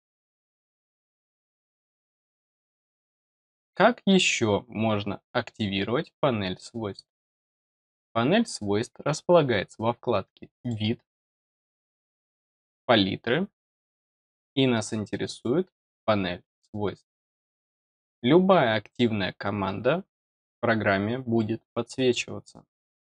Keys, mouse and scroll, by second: 6.5 click, 7.2 click, 10.5 click, 15.2 click, 16.4 click, 17.4 click.